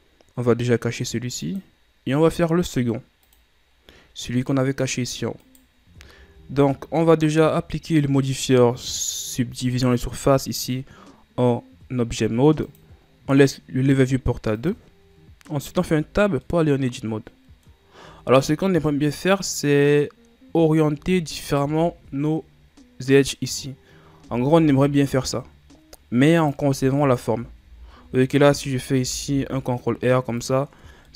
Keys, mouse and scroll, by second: 1.6 click, 3.5 click, 4.1-5.0 scroll down 4, 5.0 middle click, 5.6 right click, 5.9 ctrl+c, 6.2-6.8 shift+scroll up 1, 6.8-9.0 middle drag, 9.0 click, 12.8-15.8 drag, 15.9 Tab, 16.6-18.2 middle drag, 18.2 a, 19.1 ctrl+scroll down 2, 19.5-21.6 middle drag, 21.6 alt+right click, 24.4 r, 27.2 alt+right click, 28.3 alt+right click, 29.1 r, 30.9 Tab.